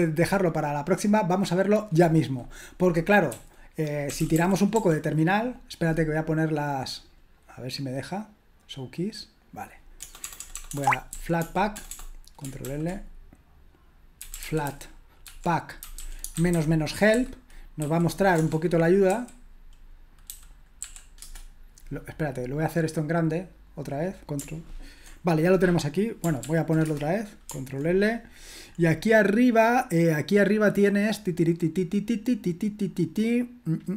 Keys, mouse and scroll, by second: 9.4 click, 10.0-11.8 typing, 12.6 ctrl+l, 13.9-19.0 typing, 20.2-21.4 typing, 23.5-26.4 drag, 26.4 ctrl+p, 26.8 Return, 28.7-31.0 scroll up 1.